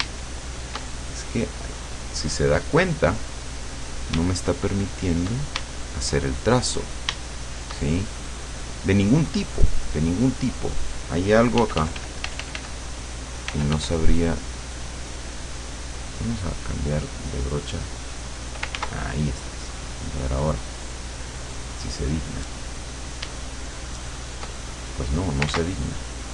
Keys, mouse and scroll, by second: 0.3 shift+click, 2.4 click, 4.5 shift+click, 5.7 shift+click, 7.4 shift+click, 8.3-11.2 drag, 11.6 f, 13.5 f, 15.1 click, 15.3 click, 15.9 click, 17.1 click, 18.0 click, 18.8 ctrl+z, 19.9 click, 21.2 click, 23.4-24.5 shift+drag, 25.5 ctrl+z.